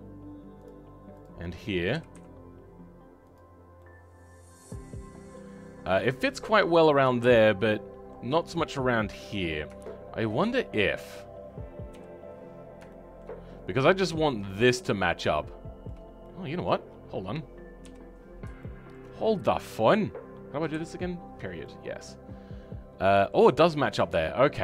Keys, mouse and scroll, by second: 3.5 scroll down 2, 3.8-11.1 middle drag, 11.1 click, 11.9 KP_3, 12.9 shift+middle click, 13.4-13.9 scroll up 2, 13.9 shift+middle click, 14.4-15.3 scroll up 11, 15.3 shift+middle click, 16.2 scroll up 1, 16.2 middle click, 16.8-17.8 scroll down 14, 17.8 KP_7, 18.1-18.6 scroll down 3, 18.6 shift+middle click, 19.1-20.7 scroll up 3, 20.7 KP_Decimal, 21.3-21.6 scroll up 2, 21.6-23.9 middle drag, 23.9-24.6 scroll down 2.